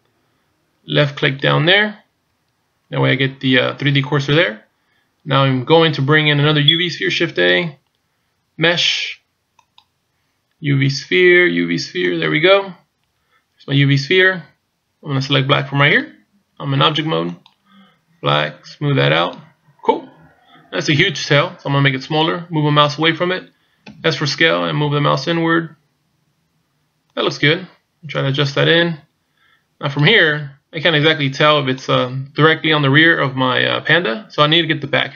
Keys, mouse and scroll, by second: 1.2 click, 2.6 click, 7.3 shift+a, 15.8 click, 19.2 click, 23.9 s, 28.2 click, 30.8 click.